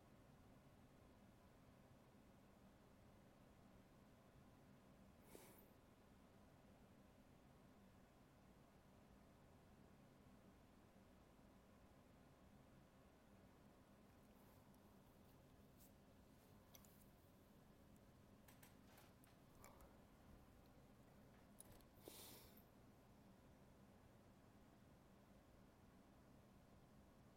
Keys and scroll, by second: 0.9 ctrl+z, 4.3 alt+space, 6.5 ctrl+z, 8.3 alt+space, 10.3 alt+space, 14.1 alt+space, 16.5 alt+space, 17.9 alt+space, 19.9 alt+space, 24.3 ctrl+z, 27.1 alt+space.